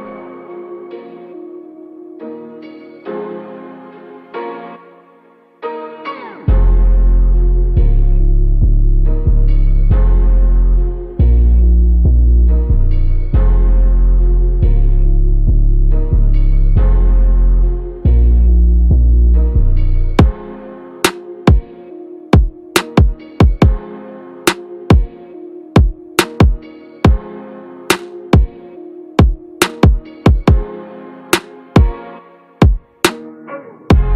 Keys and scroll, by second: 0.2 ctrl+z, 0.9 ctrl+z, 1.9 alt+z, 6.3 ctrl+-, 9.0 ctrl+=, 18.9 ctrl+-.